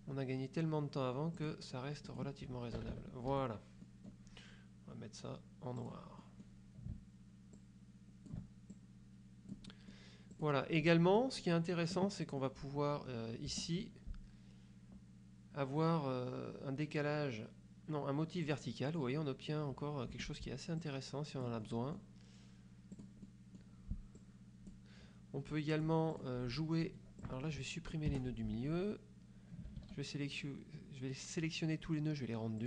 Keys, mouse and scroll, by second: 1.5 click, 2.2 click, 2.9 KP_Subtract, 3.4 F1, 3.9 middle click, 4.0 click, 5.9 click, 6.3 click, 7.7 ctrl+click, 8.8-10.2 ctrl+drag, 10.4 click, 10.9 click, 12.5 click, 13.6 F2, 18.6 click, 19.3 click, 20.3 F1, 20.9-22.3 drag, 23.1 click, 24.3 click, 25.6 click, 26.3 click, 27.3 click, 28.2 Delete, 29.9 ctrl+a.